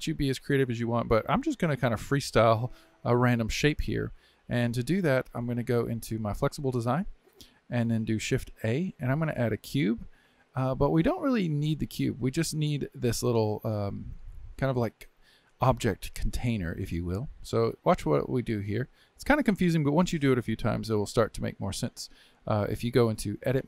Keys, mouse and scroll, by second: 5.5 click, 8.5 shift+a, 23.4 Tab.